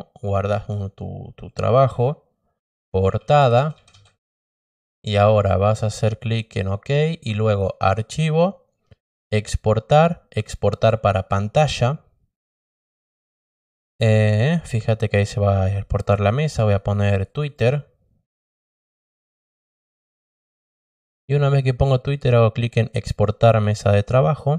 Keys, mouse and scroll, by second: 2.9-4.2 typing, 6.0 click, 7.4 click, 9.0 click, 10.3 click, 16.2 click, 16.4 click, 17.0 click, 17.2 click, 17.5 click, 18.7-19.9 typing, 21.0 click, 23.6 click.